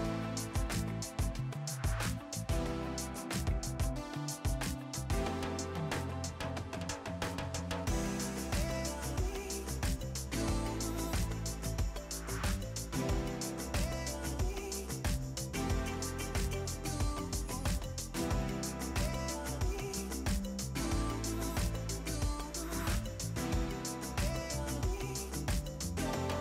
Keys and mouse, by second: 0.0 Return, 0.6 click, 0.9 right click, 1.2 click, 2.8 click, 3.2 right click, 3.4 click, 4.6 right click, 4.8 click, 5.7 h, 6.1 o, 6.3 Return, 7.0 click, 8.8 click, 9.3 right click, 9.6 click, 10.1 right click, 11.5 click, 14.4 r, 14.9 click, 18.1 click, 19.9 click, 20.4 click, 20.6 right click, 21.0 click, 21.2 Delete, 21.6 click, 21.8 Delete, 22.2 click, 22.5 click, 23.0 ctrl+e, 23.1 click, 25.9 click.